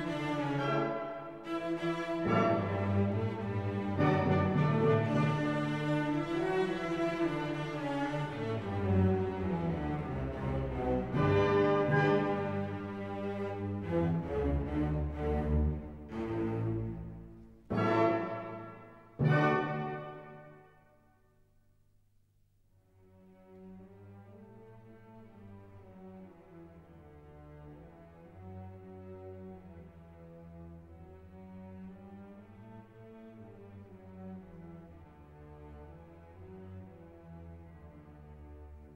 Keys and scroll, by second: 0.4 Right, 2.4 Return, 13.6 ctrl+t.